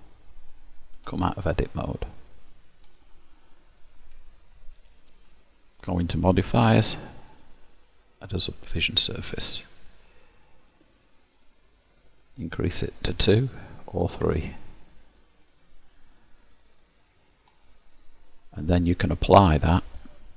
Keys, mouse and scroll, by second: 1.1 Tab, 1.1 click, 2.1 middle click, 3.3 click, 5.9 click, 6.7 click, 13.1 click, 14.1 click, 15.5 click, 16.5 middle click, 18.2-18.6 scroll up 1.